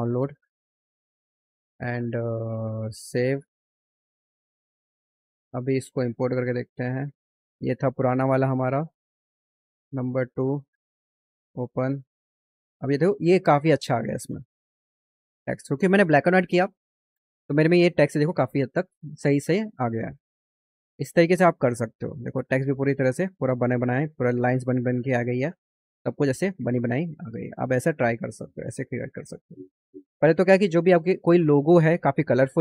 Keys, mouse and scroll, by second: 3.0 click, 4.2 click, 6.1 click, 6.9 click, 7.7 click, 10.5 click, 11.9-12.6 scroll up 6, 22.5 click, 23.4 click, 24.2 click, 24.9 click, 25.4 click, 25.9 click, 26.7 click, 27.5 click, 28.1 click, 28.7 click, 29.7 click, 30.9 click.